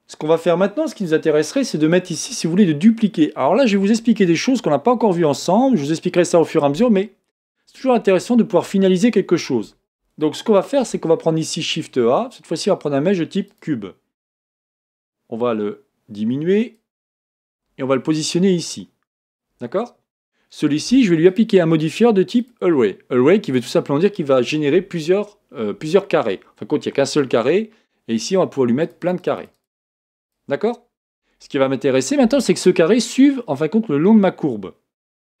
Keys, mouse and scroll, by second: 0.2-1.8 scroll up 2, 10.8 shift+a, 14.9 s, 21.3 click, 22.4-25.4 drag, 28.8-35.4 drag.